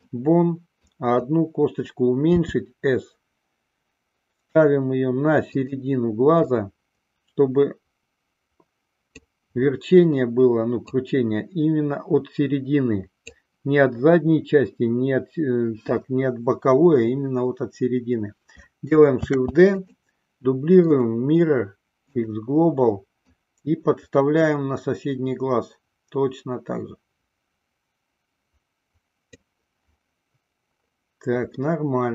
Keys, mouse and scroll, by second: 1.2 click, 2.5 s, 5.8 click, 6.9-9.6 drag, 11.0-13.7 drag, 19.4 shift+d, 20.1 click, 21.1-22.7 right drag, 23.4-29.7 drag, 31.8-32.1 middle drag.